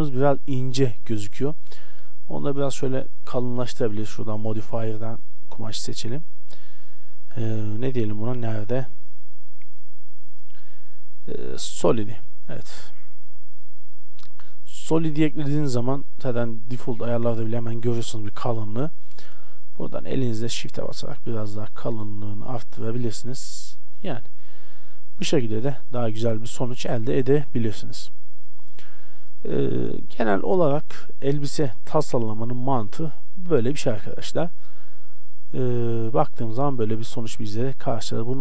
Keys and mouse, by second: 13.5-15.6 middle drag, 16.5-20.8 drag, 22.7 middle click, 24.5 a, 24.7 middle click, 35.0 shift+z, 38.1 shift+z.